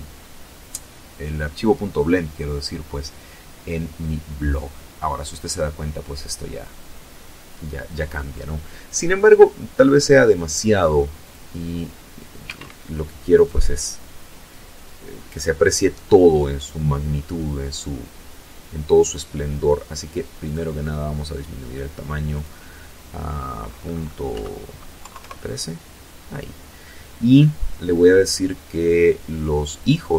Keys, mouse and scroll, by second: 9.1 click, 10.3 Escape, 11.2 right click, 13.1-13.5 scroll up 2, 14.0-14.3 scroll up 2, 18.3 click, 20.2 click, 22.2 End, 22.9 KP_3, 23.0 KP_Enter, 25.5-27.1 scroll down 2, 27.6 click, 28.3 click, 29.0 click, 29.5 click.